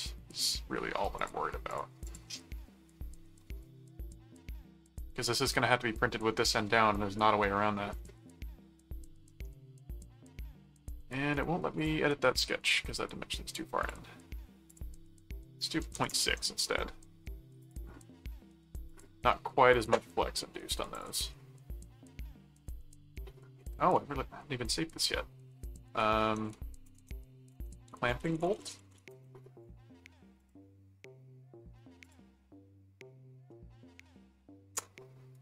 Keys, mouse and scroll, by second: 1.2-2.6 drag, 2.5 middle click, 5.4 middle click, 7.9 middle click, 9.3 middle click, 11.3 right click, 11.7 click, 13.5 click, 14.7 click, 17.6 click, 18.8 click, 19.3 middle click, 20.5 middle click, 20.9 ctrl+click, 21.1 ctrl+s, 26.4-29.4 typing, 30.4 click, 32.0 click, 33.5-34.5 middle drag, 35.3 right click.